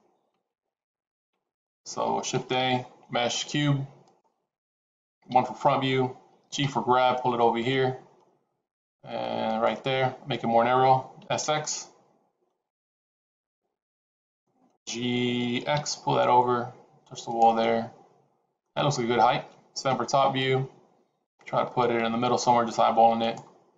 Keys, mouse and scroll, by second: 2.2 shift+a, 5.2 KP_1, 6.5 g, 11.1 s, 14.7 g, 17.5 middle click, 19.8 KP_7, 21.1 g.